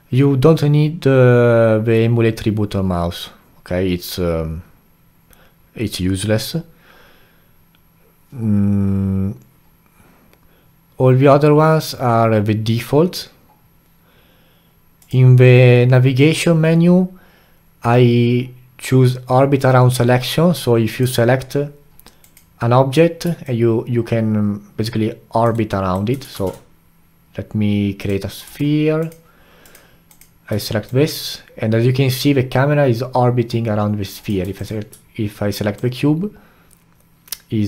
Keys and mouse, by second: 20.9 click, 22.2 click, 23.4-25.5 alt+drag, 25.5-26.3 alt+right drag, 26.3 shift+a, 28.4 g, 29.6 click, 30.1 click, 30.9-33.9 alt+drag, 34.5 click, 35.7-37.6 alt+drag.